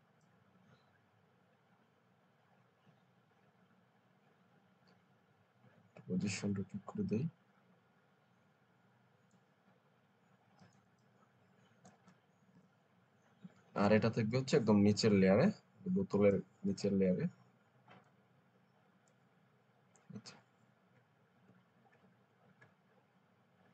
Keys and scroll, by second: 12.5 Return.